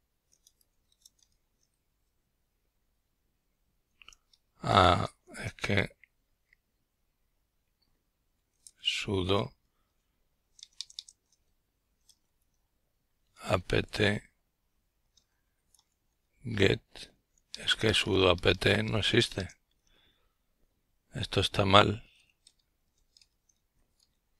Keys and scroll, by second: 0.0-1.2 typing, 4.4-10.3 typing, 12.3 Return, 13.4-14.5 Down, 14.1-15.0 typing, 15.5 Down, 15.8 Down.